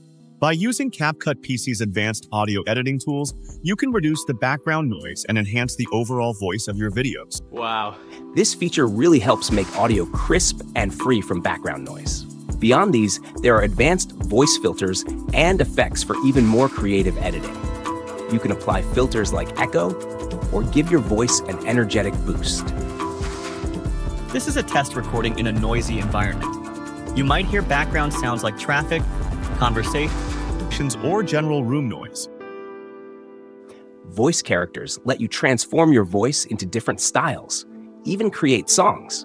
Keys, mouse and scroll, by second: 0.0 space, 7.3 space, 8.2 space, 14.6 click, 23.8 click, 29.8 click, 30.6 space, 32.7 space, 34.3 click, 38.1 click.